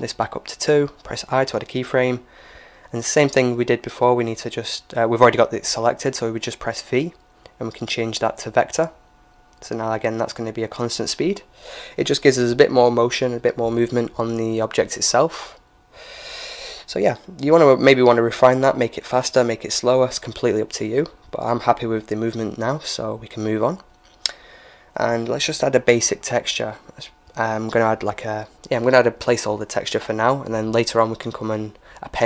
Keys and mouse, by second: 3.5-5.3 drag, 6.3 v, 9.1-10.8 drag, 14.7-16.6 right drag, 17.8 t, 18.8-20.8 drag, 21.3 t, 24.9-26.8 drag, 26.0 ctrl+s, 28.7-32.2 drag.